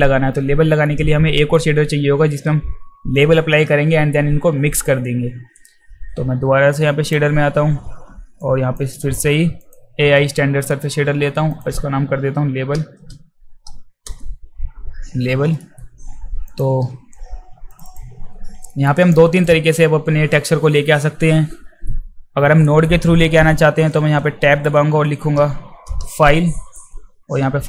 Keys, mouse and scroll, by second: 0.8-1.6 alt+middle drag, 7.0 click, 8.4-8.8 drag, 9.6 click, 10.7 alt+middle click, 11.5 click, 12.9 a, 13.8 e, 15.6 alt+middle click, 16.5 click, 17.7 click, 17.9 click, 18.7 alt+middle click, 19.1 alt+right click, 23.9 Tab, 25.0 f, 26.0 e.